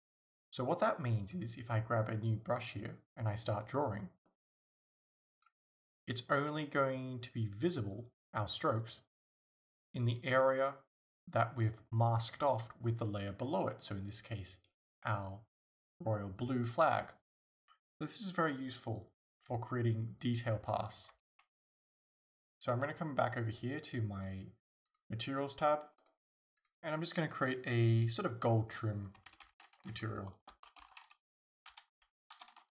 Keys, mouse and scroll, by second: 1.3 click, 2.7 click, 4.3-25.4 drag, 21.2 ctrl+z, 29.5-32.7 drag.